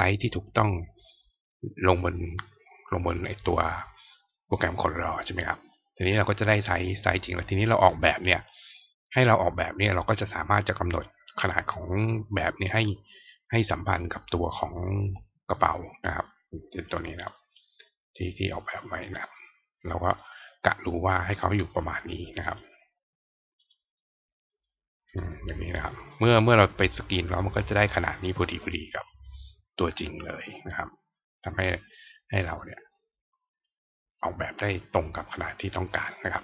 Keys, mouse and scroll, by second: 8.5 click, 16.9 click, 17.1 click, 17.5 click, 18.6-20.1 drag, 22.4 right click, 23.5 click, 24.4 click.